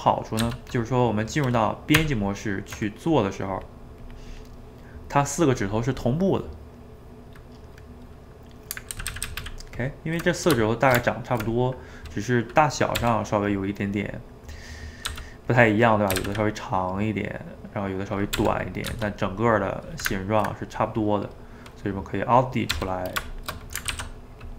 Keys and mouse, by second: 0.4 g, 1.1 middle click, 1.9 Tab, 3.1-4.7 drag, 4.7-7.7 middle drag, 8.9 ctrl+z, 9.1 ctrl+z, 10.8 shift+right click, 11.0-13.0 ctrl+middle drag, 13.0 r, 13.8-15.1 middle drag, 15.1 g, 15.7 middle click, 16.1 s, 16.9-18.4 middle drag, 18.4 r, 18.9 g, 19.6-22.7 middle drag, 22.7 r, 23.5 middle click, 23.9 alt+d.